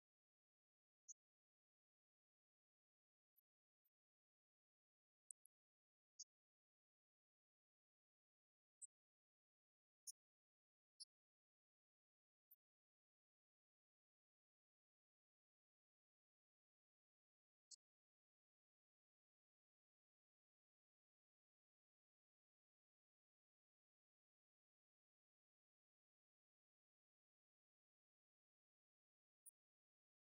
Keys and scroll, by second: 0.0 BackSpace, 0.2 Return, 2.3 Up, 2.5 F2, 3.2 5, 3.4 Return, 4.4 shift+Down, 5.2 ctrl+shift+Left, 5.6 shift+space, 6.7 ctrl+-, 7.0 Right, 7.2 Left, 7.3 Right, 7.6 Up, 9.2 Left, 9.4 Right, 17.2 Right, 17.3 Left, 20.5-23.3 typing, 23.4 Up, 23.8 shift+Down, 24.5 ctrl+d, 24.7 Right, 25.7 Left, 26.0 Right, 27.8 Right, 28.5 Left, 29.9 Right, 30.1 Left.